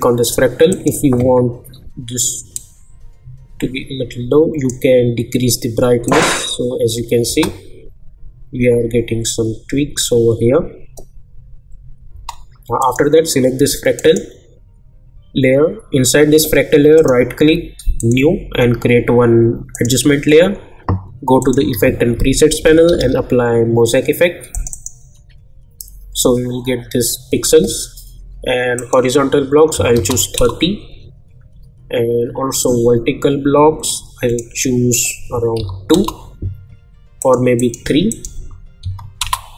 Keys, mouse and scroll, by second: 7.2 space, 12.3 space, 12.8 click, 16.9 right click, 18.0 click, 21.7 ctrl+a, 22.3-23.5 typing, 24.5 click, 28.7 click, 30.3 Return, 32.6 click, 35.9 Return, 37.2 click, 39.2 Return.